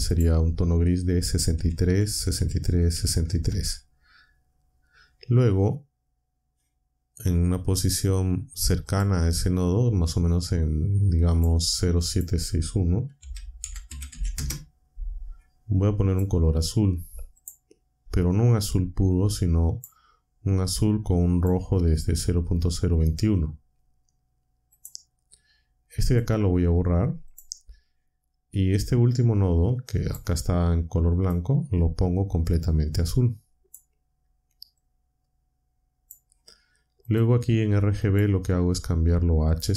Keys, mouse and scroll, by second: 0.1 click, 1.3-3.6 typing, 8.9 click, 11.3 click, 12.0 click, 12.9-14.6 typing, 16.1 click, 17.3 click, 18.7-20.0 drag, 20.7-21.6 drag, 24.7 click, 26.0 click, 27.2 click, 29.9 click, 31.2 click, 32.7-33.9 drag, 34.7-36.2 drag, 37.0 click, 38.0 click, 39.5 click.